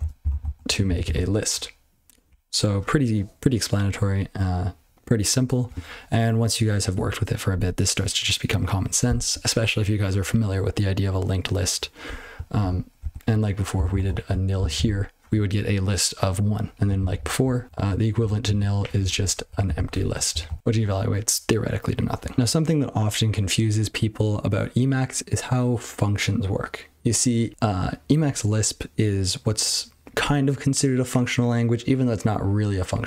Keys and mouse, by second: 0.0-0.5 typing, 1.0 ctrl+c, 12.6 ctrl+f, 13.0 ctrl+w, 13.7 n, 14.1 l, 14.8 ctrl+c, 16.7 ctrl+b, 16.9 ctrl+b, 17.1 ctrl+b, 17.3 ctrl+b, 17.6 ctrl+alt+k, 18.2-19.9 typing, 19.6 ctrl+e, 20.4 ctrl+c, 20.6 ctrl+g.